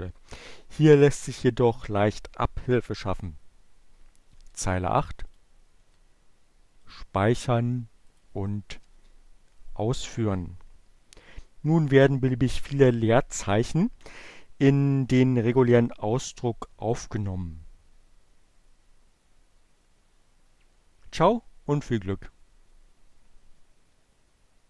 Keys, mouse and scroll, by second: 4.9 click, 5.6 Delete, 6.5 click, 7.6 click, 8.3 Up, 8.5 Return.